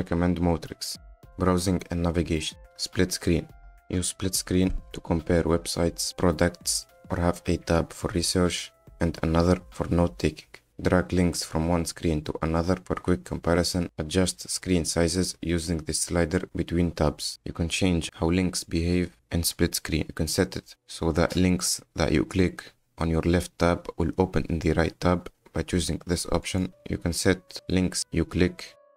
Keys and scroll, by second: 6.9 F10.